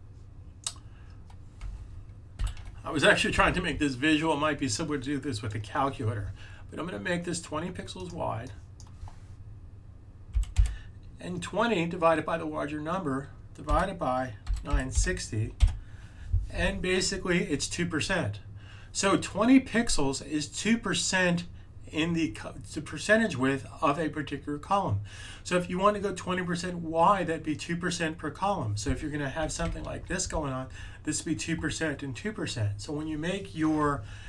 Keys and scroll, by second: 1.5 z, 10.0-11.0 typing, 13.6-15.4 typing, 29.7 super+z.